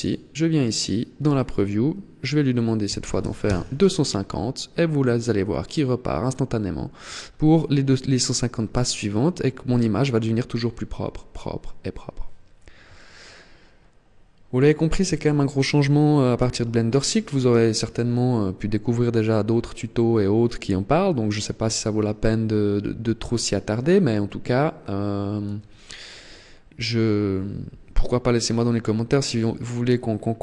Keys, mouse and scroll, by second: 0.4 click, 27.9-29.1 scroll up 6, 29.1-30.1 scroll up 3, 30.1-30.4 scroll up 1.